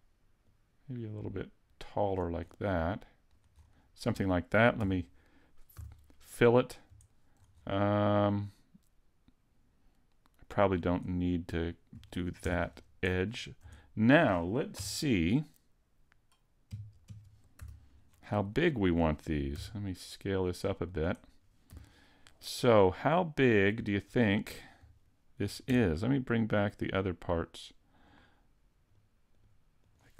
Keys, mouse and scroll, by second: 0.4 click, 2.4-2.8 scroll up 4, 2.8 middle click, 3.6 scroll up 2, 4.8 f, 5.7 a, 6.3 middle click, 7.1 shift+middle click, 8.0 scroll up 1, 8.1 middle click, 10.8 scroll down 3, 11.1 middle click, 12.1 shift+middle click, 12.4 Tab, 12.7-13.3 scroll down 1, 13.3-13.8 scroll down 4, 13.8 shift+middle click, 14.8 KP_3, 16.7 KP_5, 17.1 KP_5, 17.6 z, 18.1 scroll down 3, 18.5 shift+middle click, 19.5 s, 21.0 click, 21.7 g, 24.2 click, 24.5 scroll up 2, 25.1 shift+middle click, 26.6 shift+click, 28.1 shift+click, 28.9 shift+click, 29.4 shift+click, 29.8 shift+click.